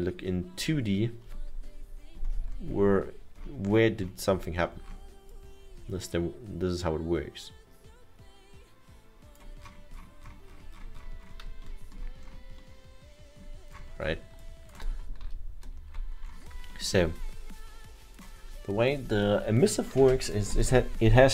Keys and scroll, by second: 11.9 alt+7, 15.2 ctrl+z, 17.7 ctrl+z.